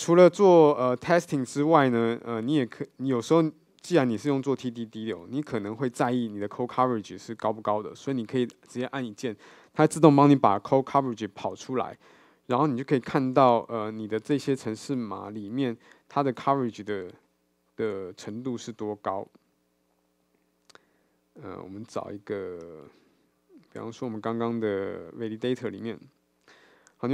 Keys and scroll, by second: 1.6 super+F2, 3.1 super+w.